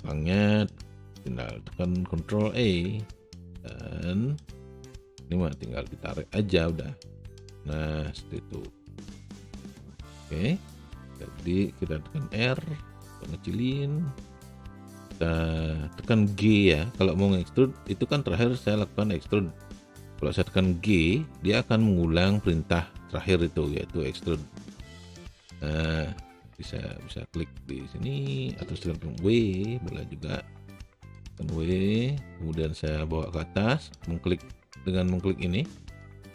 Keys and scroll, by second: 2.5 ctrl+e, 12.4 r, 20.9 g, 29.3 w.